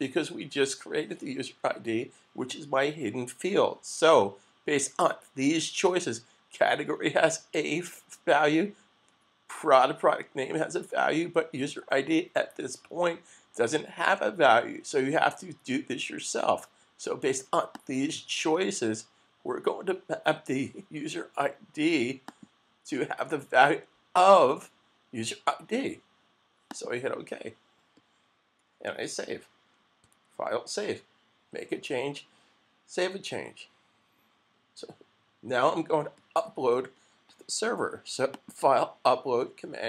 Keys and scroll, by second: 30.0 super+s.